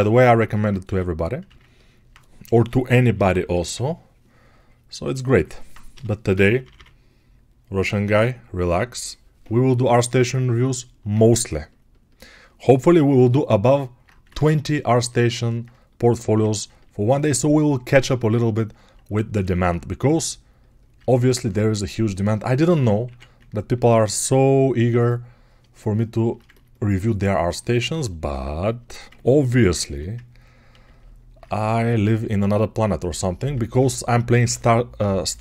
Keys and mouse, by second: 0.0 r, 14.3 ctrl+Tab, 14.3-18.9 ctrl+middle drag, 23.9-30.0 shift+drag, 30.0 ctrl+1, 30.0-35.4 ctrl+right drag.